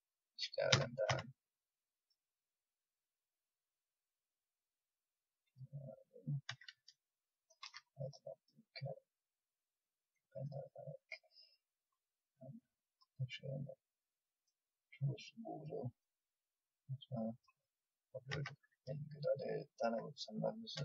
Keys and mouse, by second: 0.7 s, 2.9-5.5 drag, 6.4 a, 7.6 ctrl+r, 9.2-10.6 drag, 10.6 middle click, 13.2 middle click, 15.0 click, 15.9 middle click, 18.3 a, 20.7 a.